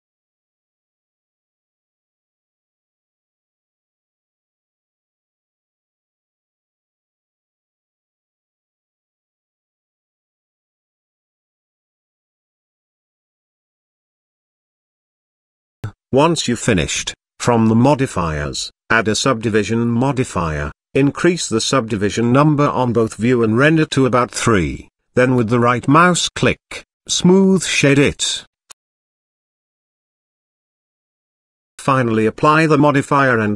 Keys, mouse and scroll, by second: 0.2 s, 2.3 middle click, 3.0 e, 5.4 i, 8.2 s, 10.6 e, 12.3 middle click, 13.0 shift+middle click, 13.2-13.6 middle drag, 13.7 Tab, 14.1 middle click, 16.0 click, 16.7-18.3 drag, 18.9-19.4 middle drag, 19.6 shift+middle drag, 20.0 middle click, 21.9 click, 23.2-24.4 middle drag, 27.0-29.3 middle drag, 32.2 click, 33.0 click.